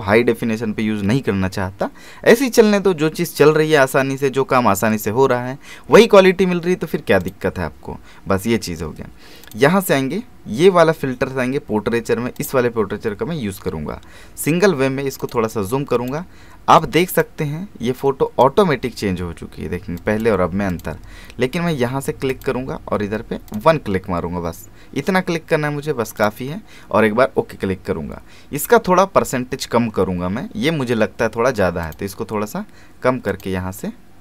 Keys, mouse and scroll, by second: 5.9 alt+Num_Lock, 7.2 click, 9.4 click, 12.3 click, 15.2-20.0 drag, 26.2 click, 31.8 click.